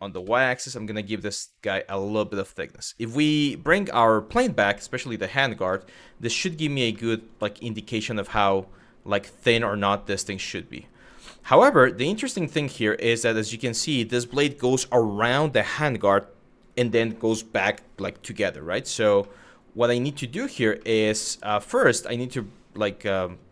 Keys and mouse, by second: 1.6 click, 3.9 click, 4.4 middle click, 5.4 middle click, 6.0 middle click, 6.6 shift+middle click, 9.8 middle click, 11.2 middle click, 12.0 shift+middle click, 19.0 middle click, 20.0 shift+middle click, 20.5 middle click, 22.1 middle click.